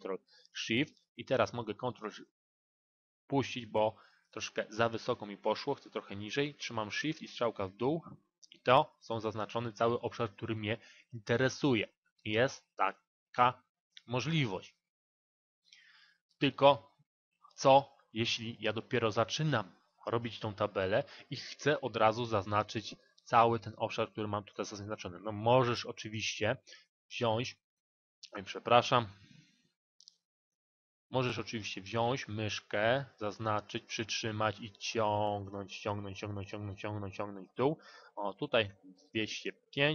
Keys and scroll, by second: 5.8 shift+Down.